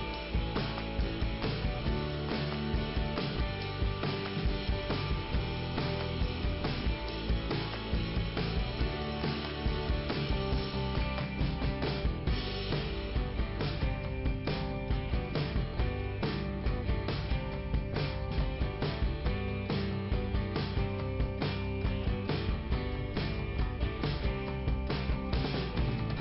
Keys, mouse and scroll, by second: 0.2-0.8 scroll up 1, 1.1 click, 2.2 click, 3.4 click, 3.5 click, 4.5 click, 5.4 click, 6.3 click, 7.0 middle click, 10.2 click, 11.1 click, 12.0 click, 16.6 click, 17.8 click, 19.5 i, 20.3 middle click, 22.3 click, 23.1 middle click, 24.0-24.5 scroll up 1, 24.7 middle click.